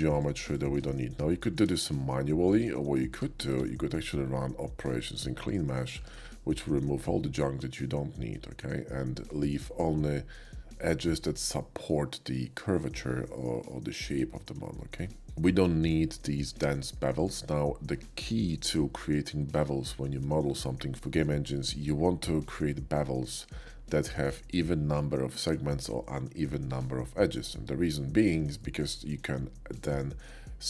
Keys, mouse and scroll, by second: 0.9 alt+shift+middle click, 1.8 shift+middle click, 2.8 shift+middle click, 3.1 Tab, 3.4 q, 4.6 Tab, 5.4 click, 5.9 Tab, 6.6 middle click, 7.4 middle click, 7.9 middle click, 9.1-10.4 middle drag, 11.6 shift+middle click, 12.9-14.3 shift+middle drag, 14.7 middle click, 15.7 alt+shift+click, 17.1 alt+shift+click, 21.0 shift+middle click, 28.6 middle click, 29.8 shift+click.